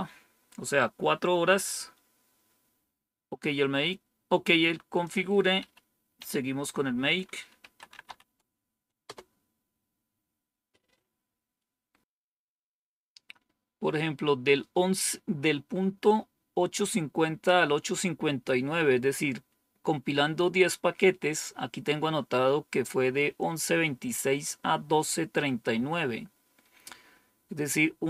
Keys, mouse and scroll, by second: 5.0 click, 5.5 Up, 6.1 Down, 7.3-8.5 typing, 9.0 Return.